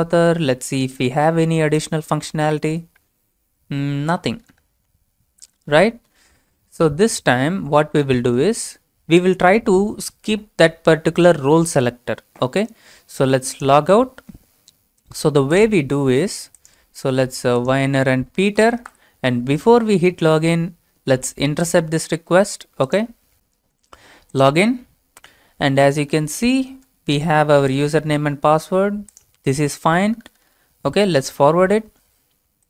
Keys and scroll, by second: 16.9 ctrl+v, 18.1-19.4 typing.